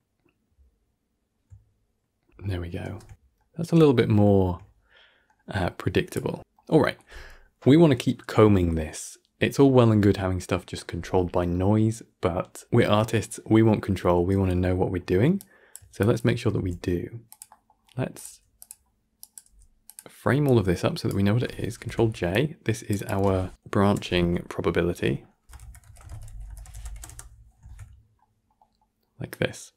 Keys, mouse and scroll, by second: 2.9 shift+space, 3.3-6.4 middle drag, 13.8-14.6 scroll down 10, 14.6-15.3 middle drag, 15.3 click, 15.9 shift+click, 16.4 g, 17.4 middle click, 17.6-18.0 scroll up 6, 18.0 click, 18.2 g, 19.1 click, 19.3 g, 20.3 click, 21.7 ctrl+j, 22.2 click, 22.8 click, 23.0 F3, 27.5 ctrl+s, 27.8 scroll down 7, 28.1-29.2 middle drag, 29.2 click.